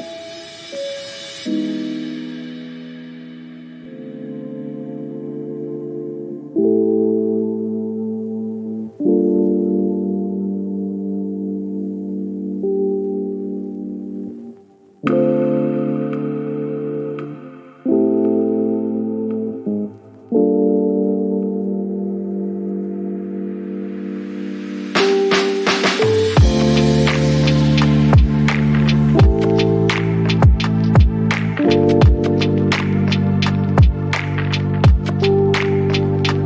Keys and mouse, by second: 1.4 middle click, 1.6 KP_0, 3.9-5.0 shift+drag, 5.1 click, 7.4 click, 8.3 middle click, 8.6 shift+middle click, 9.0 click, 10.0 click, 10.7 middle click, 13.5 middle click, 14.0 KP_Decimal, 14.3 click, 14.4 shift+middle click, 14.7 middle click, 15.0 click, 15.4 click, 16.8 middle click, 17.4 shift+middle click, 18.6 middle drag, 18.8 shift+middle click, 19.2 shift+middle click, 21.2 click, 21.4 click, 21.6 click, 22.0 click, 22.4 r, 23.8 click, 24.0-24.6 ctrl+drag, 24.7 KP_7, 25.0 shift+middle click, 25.3 shift+middle click, 25.6 g, 26.8 middle click, 27.2 middle click, 27.3 middle click, 28.3 middle click, 28.7 shift+middle click, 29.0 shift+middle click, 30.2 middle click, 30.4 shift+middle click, 30.7 click, 31.0 click, 31.8 r, 32.6 click, 32.8 middle drag, 33.1 shift+middle click, 33.2 middle drag, 33.6 shift+middle click, 33.8 shift+middle click, 34.1 shift+middle click, 35.1 click, 36.4 middle click.